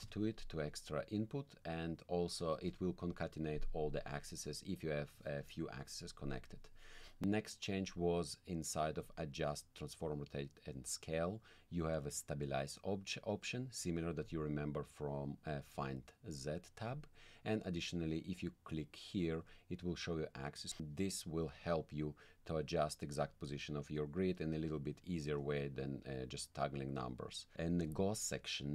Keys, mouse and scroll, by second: 1.0 click, 9.0 click, 14.2 click, 16.9 click, 19.4 click, 21.9 click, 23.2 click, 24.2 click, 27.9 click.